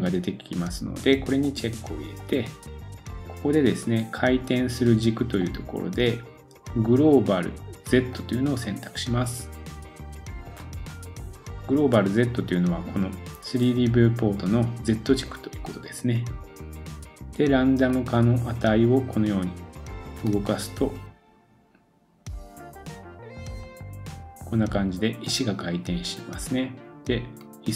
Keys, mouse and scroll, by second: 1.4 click, 1.6-2.1 middle drag, 2.1-27.7 drag.